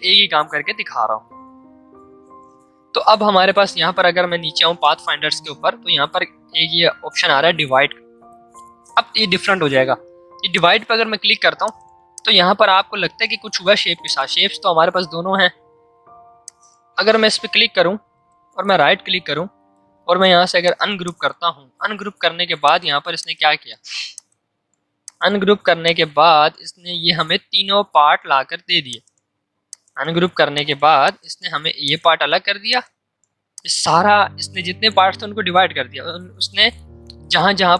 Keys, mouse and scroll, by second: 10.5-14.0 drag, 16.4 click, 18.0 right click, 20.6-27.9 drag, 27.9 ctrl+z, 28.8 click.